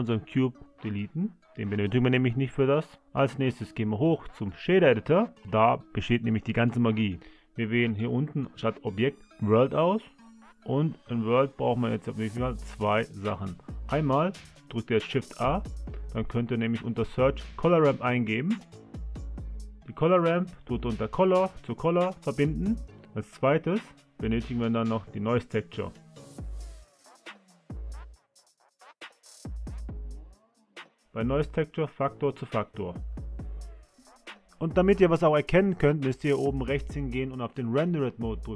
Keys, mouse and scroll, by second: 1.5 x.